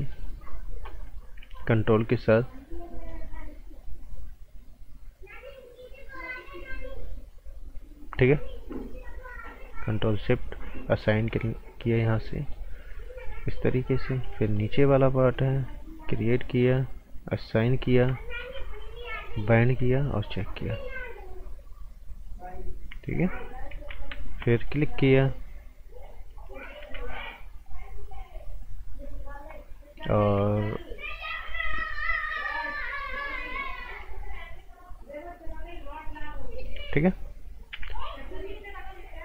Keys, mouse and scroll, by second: 0.0-0.1 typing, 1.5 ctrl+click, 3.8 ctrl+click, 9.7 ctrl+click, 12.4 click, 13.5 right click, 14.4 alt+right click, 16.0 ctrl+click, 19.1 click, 19.5 right click, 19.8 z, 22.2 z, 23.9 ctrl+z, 24.5 alt+right click, 26.8 g, 27.6 click, 35.4 click, 36.4 right click, 37.7 b.